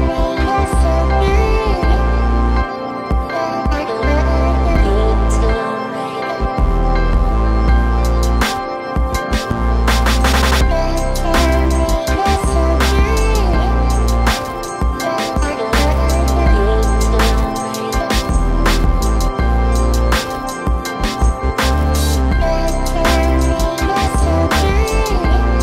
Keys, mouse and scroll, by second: 0.1 typing, 1.2 click, 1.2 click, 2.3 click, 3.0 typing, 3.2 click, 4.5 typing, 5.0 click, 5.1 click, 5.8-11.5 drag, 11.5-14.9 drag, 14.9 scroll down 1, 15.3 click, 18.2 click, 18.3 click, 19.4 click, 20.0-20.4 scroll up 1, 20.4 click, 22.2 scroll down 1, 22.5 click, 23.0 right click, 23.8 click, 24.6-25.6 drag.